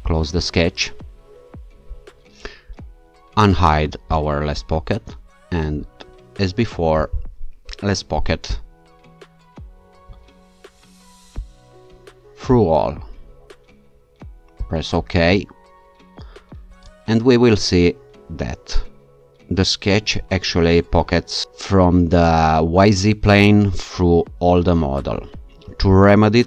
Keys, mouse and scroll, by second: 0.1 click, 4.1 click, 8.5 alt+click, 11.4 click, 12.5 click, 14.6 click.